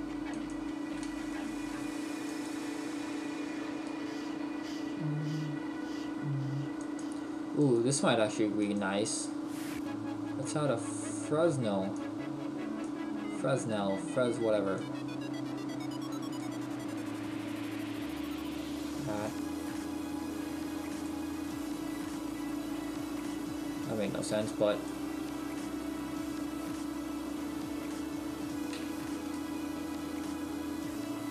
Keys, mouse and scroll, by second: 1.2 Delete, 1.2 click, 2.5 click, 10.2-10.8 scroll down 6, 16.4 click, 17.2-17.7 scroll up 4, 19.6 click, 19.6-20.2 scroll up 3, 22.2-22.8 scroll up 1, 24.7 click, 26.2-26.8 scroll up 2, 29.3 shift+middle click, 30.9-31.3 scroll down 3.